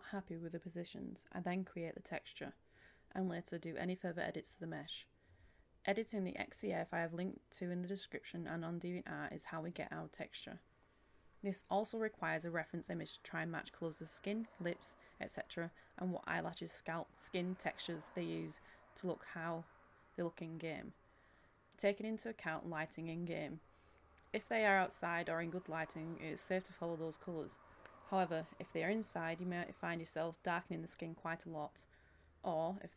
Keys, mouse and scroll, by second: 0.5 click, 0.9-3.0 scroll down 1, 3.8-6.4 drag, 6.8-7.8 scroll down 1, 7.8 click, 8.3-8.6 scroll down 1, 8.6-9.6 scroll up 1, 9.6 click, 13.0-13.6 scroll down 1, 13.6-14.3 scroll up 1, 14.5 click, 19.6 Delete, 19.9 ctrl+shift+a, 20.3-21.9 drag, 22.5 Delete, 22.7 ctrl+shift+a, 23.1 click, 25.1 Delete, 25.5-28.6 drag, 29.4-32.9 drag.